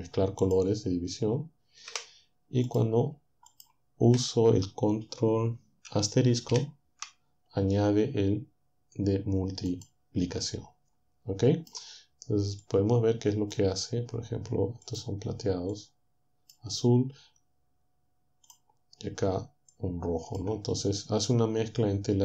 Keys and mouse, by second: 0.5 click, 1.9 Delete, 2.7 click, 3.5 shift+click, 6.5 ctrl+*, 9.7 click, 10.5-13.7 drag, 14.9 click, 15.7 click, 18.5 click, 19.7 click.